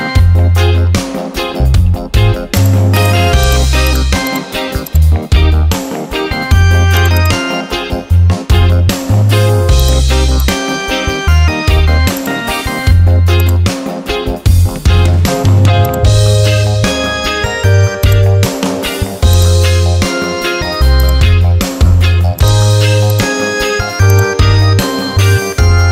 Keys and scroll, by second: 7.6 Caps_Lock, 8.4 Return, 25.7 Return.